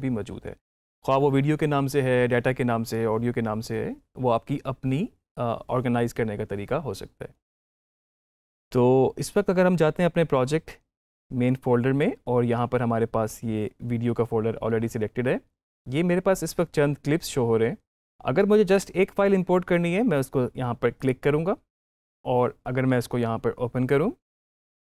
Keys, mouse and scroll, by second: 20.9 click, 24.2 click.